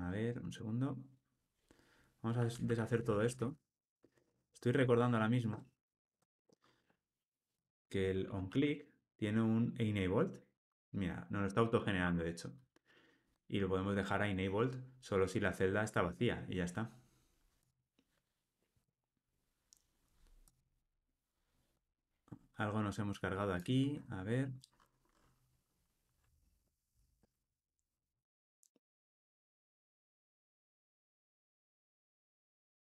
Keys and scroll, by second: 1.1 super+z, 1.6 super+z, 2.4 super+z, 3.1 super+z, 5.7 shift+super+z, 12.0 Tab, 28.2 super+z, 31.6 super+z, 32.3 shift+super+z.